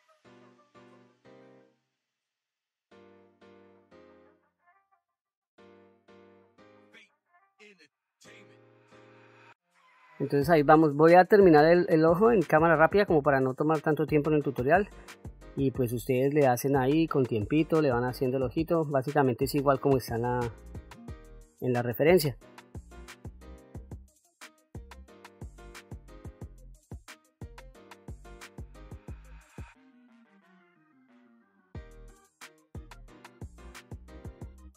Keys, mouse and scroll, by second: 0.2 f, 0.3 ctrl+middle click, 0.7 f, 0.8 click, 1.8-3.1 drag, 3.1 middle click, 3.4 middle click, 3.5 click, 4.1 shift+f, 4.3 shift+f, 4.3 shift+f, 4.4 click, 4.8 middle click, 4.9 click, 5.1 click, 5.5 click, 6.3 click, 6.6 click, 7.0 f, 7.2 click, 7.8 click, 7.8 f, 8.6 middle click, 8.7 middle click, 8.8 click, 24.0 click, 24.1 middle click, 24.6 click, 24.8 shift+f, 25.0 shift+f, 25.1 click, 26.3 shift+f, 26.3 click, 26.9 middle click, 27.2 click, 27.2 f, 27.7 click, 28.6 middle click, 28.7 click, 29.7 middle click, 29.9 middle click, 30.0 click, 30.2 middle click, 30.3 click, 31.3 click, 31.7 middle click, 31.8 click, 32.7 middle click, 32.9 middle click, 34.1 click, 34.5 middle click.